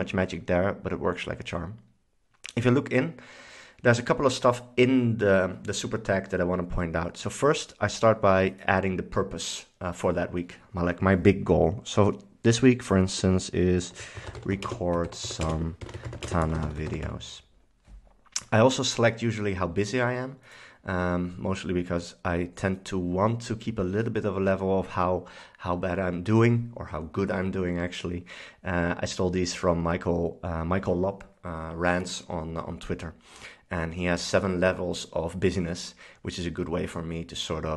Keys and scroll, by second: 13.7-17.8 typing.